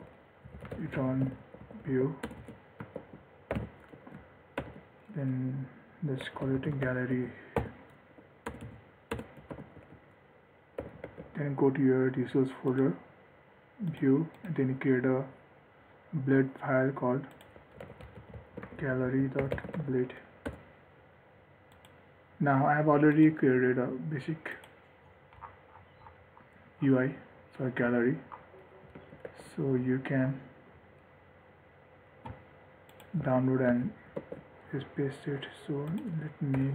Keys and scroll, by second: 11.2 ctrl+s, 29.2 ctrl+a, 29.5 ctrl+c, 33.5 ctrl+a, 33.9 ctrl+v.